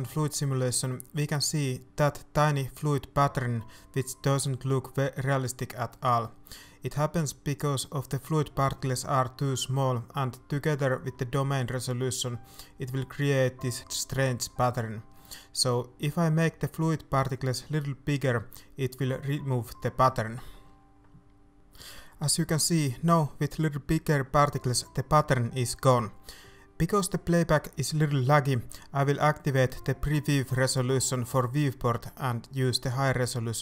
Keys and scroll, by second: 13.5 BackSpace, 14.5 KP_2, 14.6 Return, 15.7 ctrl+s, 22.1 alt+a, 26.4 alt+a.